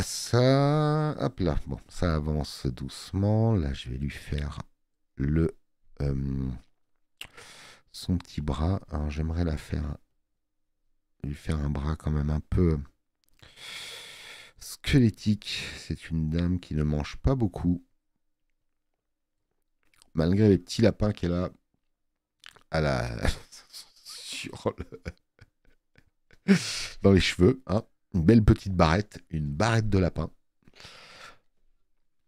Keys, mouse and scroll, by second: 1.2 click, 29.0 click.